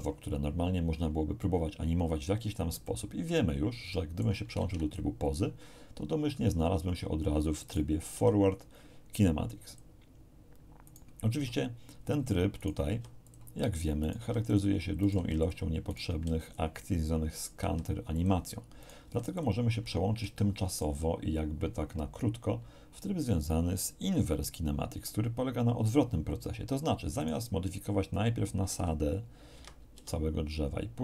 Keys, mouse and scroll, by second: 2.8 shift+middle click, 3.9 shift+middle click, 4.6 ctrl+shift+Tab, 7.6 right click, 8.1 r, 9.6 click, 10.8 right click, 11.3 r, 12.0 click, 12.6 right click, 12.8 r, 13.2 click, 14.0 right click, 14.2 r, 14.4 click, 15.0 right click, 15.1 r, 15.4 click, 15.8 right click, 16.0 r, 16.4 click, 17.3 right click, 17.6 r, 18.1 click, 18.8 right click, 19.0 r, 19.3 click, 20.3 shift+click, 27.2 right click, 28.7 g, 29.5 Escape, 29.9 r.